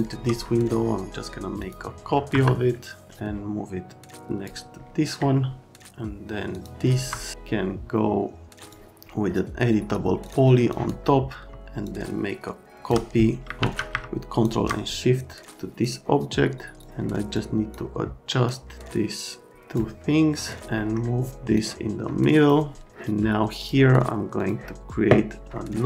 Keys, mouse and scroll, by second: 1.6 middle click, 2.3 F3, 3.0 middle click, 6.5 click, 7.0 F3, 8.6 click, 10.2 click, 10.7 click, 11.8 shift+click, 13.6 ctrl+z, 14.1 ctrl+shift+click, 15.8 click, 16.8 click, 17.3 click, 18.4 click, 20.4 click, 20.7 middle click, 21.5 click, 23.6 click, 24.4 click, 25.5 right click.